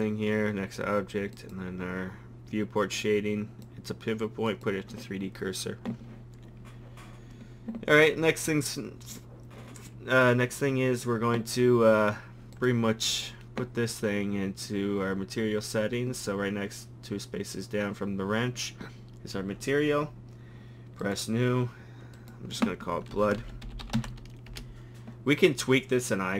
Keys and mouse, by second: 1.4-2.3 drag, 23.8 o.